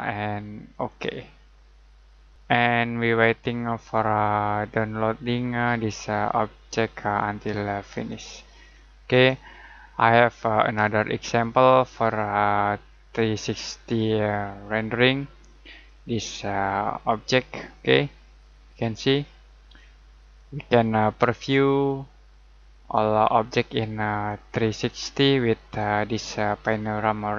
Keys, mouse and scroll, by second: 3.7 click, 7.9 click, 8.6 scroll down 1, 10.8 click, 13.6 click, 17.1 scroll down 1, 18.7 click.